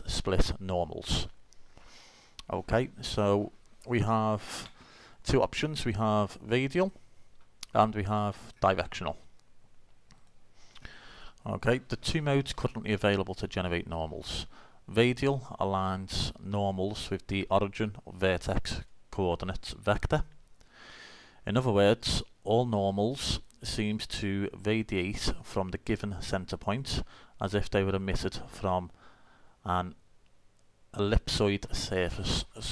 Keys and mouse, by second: 6.8 click, 8.7-12.2 drag, 12.2-13.8 middle drag.